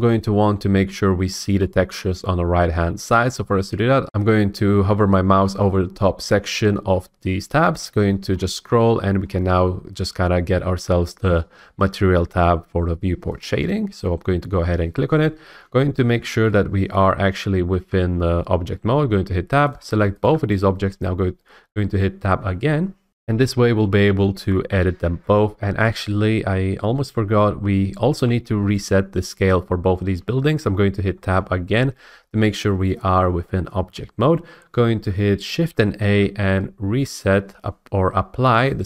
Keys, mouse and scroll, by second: 0.4 shift+middle click, 1.3-2.0 scroll, 2.0-2.4 scroll, 4.0 F8, 8.3 middle click, 8.8-11.4 middle drag, 8.8-10.4 scroll, 13.4-15.4 drag, 17.1-19.1 middle drag, 17.1-17.7 scroll, 17.7 Tab, 19.7 click, 20.2 shift+click, 22.4 Tab, 23.1 F8, 31.1 Tab, 36.0 ctrl+a.